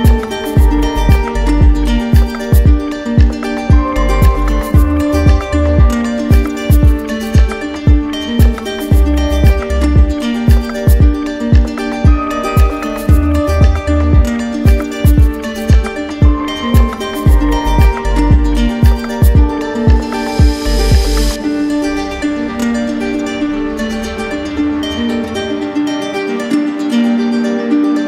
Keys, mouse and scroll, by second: 0.9 alt+click, 2.0 click, 2.9 click, 3.5 right click, 4.5 right click, 5.2-7.3 drag, 8.3 click, 9.4 click, 9.7 click, 10.0 shift+click, 11.0 alt+click, 11.7 click, 12.3 alt+click, 13.1 click, 13.4 click, 13.9 click, 19.9-21.0 drag, 21.7 click, 23.1 click, 23.8 click, 27.7 click.